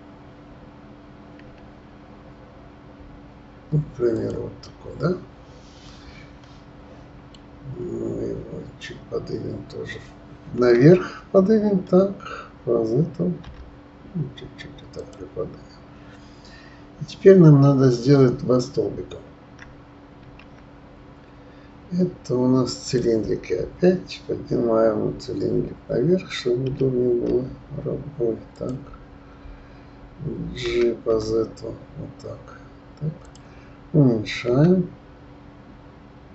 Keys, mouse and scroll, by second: 1.4 s, 4.6-7.6 middle drag, 10.6 g, 20.2 shift+a, 26.7 d, 27.3 z, 30.6 g, 34.5 s.